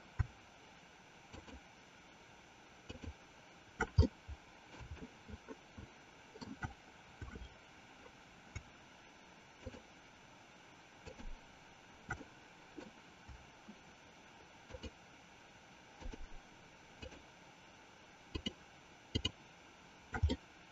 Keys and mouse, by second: 1.3 shift+click, 2.8 shift+click, 4.0-6.6 middle drag, 11.0 shift+click, 12.3 middle click, 14.6 shift+click, 16.0 shift+click, 17.2 shift+click, 18.3 shift+click, 19.3 shift+click, 20.5-20.7 middle drag.